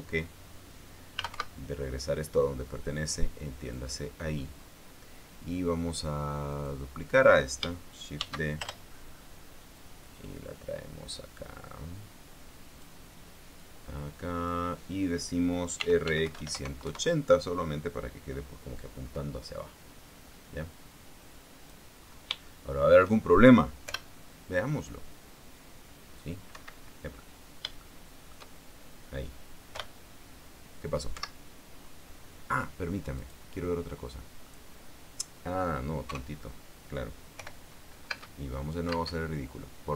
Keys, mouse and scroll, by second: 0.1 click, 1.6-2.5 typing, 4.3 click, 5.3 scroll up 2, 5.9 scroll down 2, 7.2 right click, 8.9 shift+d, 9.3 shift+Return, 10.5-13.7 drag, 13.7 middle click, 14.3-15.3 drag, 16.5-17.2 typing, 17.5 KP_Enter, 21.4-22.6 drag, 22.7-23.0 scroll up 1, 23.2 shift+middle click, 24.5 p, 26.6 scroll down 2, 27.0 click, 27.2 Escape, 27.8-28.3 scroll down 2, 28.5 shift+middle click, 29.5 shift+scroll up 3, 30.4 p, 31.9 Escape, 33.9 right click, 34.4 middle click, 35.3-35.6 scroll up 1, 35.6 scroll down 1, 35.8-36.8 scroll up 1, 36.8 scroll up 1, 36.8 KP_0, 38.0 p, 38.8 space, 39.6 space.